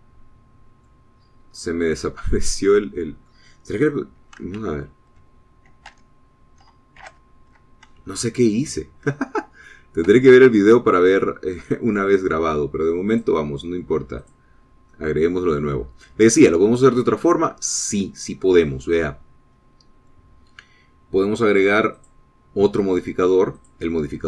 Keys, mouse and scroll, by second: 0.3 Tab, 0.9-2.2 drag, 2.7-3.2 scroll up 1, 3.4 scroll down 1, 3.8 click, 5.8 alt+h, 7.2 Tab, 8.2 alt+h, 9.0 alt+scroll down 1, 11.3 Tab, 11.8-13.8 middle drag, 14.3 click, 15.4 click, 16.2 middle click, 17.0 scroll up 1, 17.7 middle click, 23.1 click.